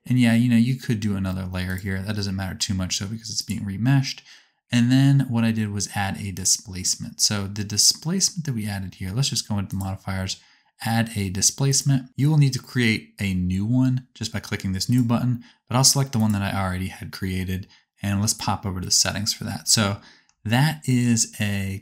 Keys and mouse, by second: 1.7-3.4 drag, 1.7-3.4 middle drag, 1.7-3.4 right drag, 9.7-11.0 drag, 9.7 middle click, 9.7-11.0 right drag, 11.0-12.1 middle drag, 21.0-21.8 drag, 21.0-21.8 middle drag, 21.0-21.8 right drag.